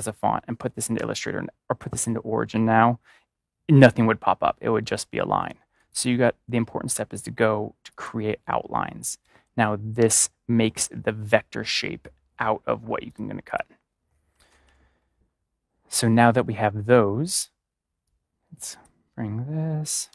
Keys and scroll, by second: 0.7 ctrl+=, 9.9 ctrl+y, 14.0 ctrl+y, 14.3 ctrl+-, 20.0 v.